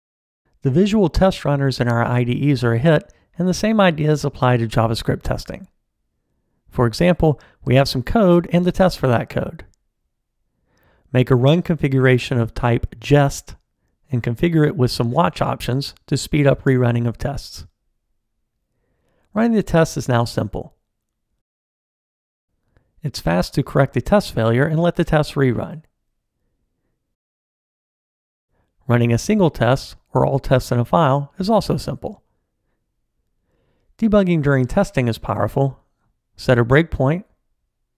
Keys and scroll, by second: 17.1 ctrl+alt+r, 23.8 super+s, 33.4 super+F8.